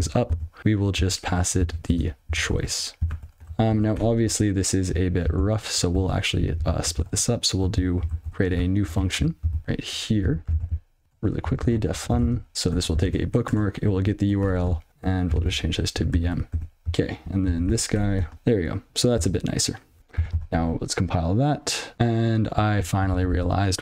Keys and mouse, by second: 0.1 ctrl+b, 0.6 ctrl+alt+k, 1.9-3.6 typing, 4.1 Tab, 5.0 ctrl+f, 6.9 ctrl+alt+k, 8.7 ctrl+e, 9.1 ctrl+n, 9.6 ctrl+f, 10.5 ctrl+alt+k, 11.0 ctrl+alt+space, 11.3-13.0 typing, 13.1 ctrl+e, 14.9 ctrl+f, 15.7 ctrl+alt+k, 16.1 m, 16.5 ctrl+e, 17.6 ctrl+n, 18.3 (, 18.3 ctrl+s, 18.7 ctrl+p, 19.1 ctrl+k, 20.0 ctrl+s, 20.3 ctrl+c, 21.9-23.8 ctrl+f.